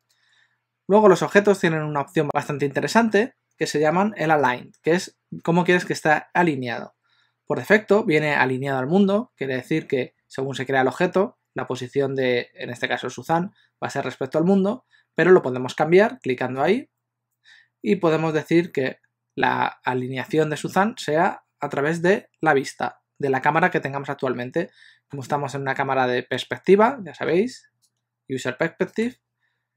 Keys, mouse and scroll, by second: 16.7 click.